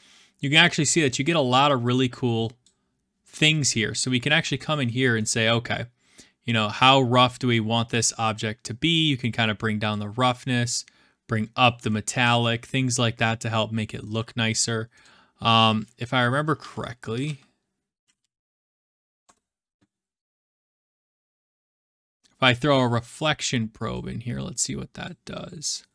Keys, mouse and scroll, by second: 2.6-4.2 drag, 4.4-5.0 scroll, 5.0 shift+scroll, 9.9 click, 11.7 click, 12.0 ctrl+z, 14.0-14.8 scroll, 15.0-15.6 middle drag, 15.6 click, 16.8-18.5 typing, 19.2 Return, 20.4 Return, 21.8-22.8 drag, 22.8-24.2 middle drag, 24.3-25.9 drag.